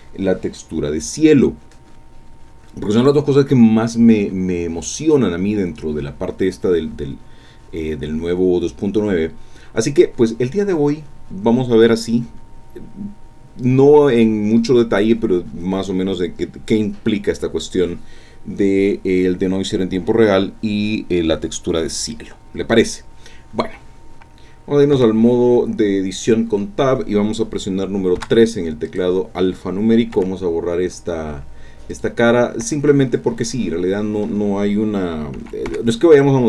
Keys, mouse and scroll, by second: 24.9 Tab, 28.2 3, 28.9 click, 30.1 x, 31.9 click, 32.6 Tab, 32.9-34.4 drag, 35.3 s, 35.7 y.